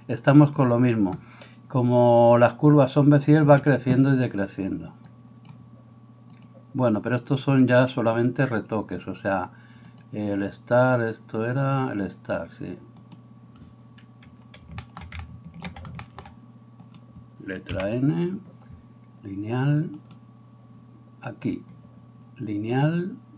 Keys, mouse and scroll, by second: 3.4 Escape, 10.1-13.0 middle drag, 13.0 right click, 13.2-16.9 middle drag, 16.9 right click, 17.0-23.3 middle drag, 17.7 n, 20.1 right click, 21.7-23.3 drag.